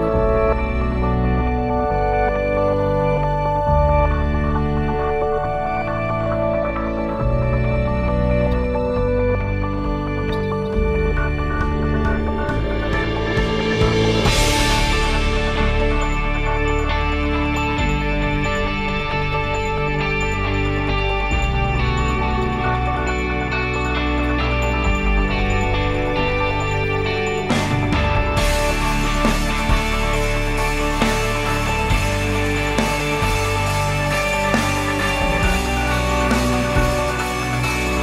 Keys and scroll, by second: 10.3 ctrl+s, 19.9-23.4 typing, 23.6 Return, 27.6-32.3 typing, 33.1 Return.